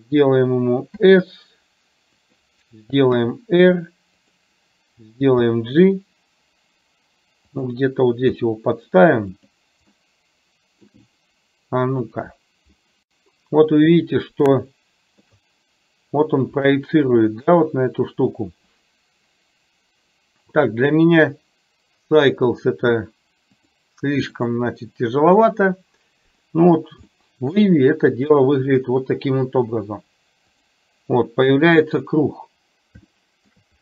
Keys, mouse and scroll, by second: 1.1 s, 3.3 r, 5.3 g, 8.4 s, 10.1 middle click, 15.6-18.0 shift+middle drag, 22.5 click, 23.6-24.8 drag, 27.1-27.8 shift+middle drag, 27.1 scroll up 1, 30.6 click, 33.2 shift+middle click.